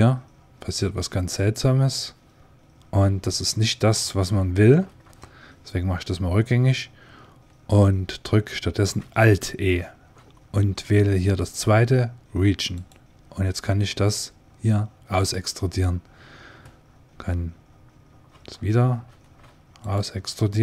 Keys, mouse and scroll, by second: 4.6 ctrl+z, 9.6 alt+e, 19.0 alt+e.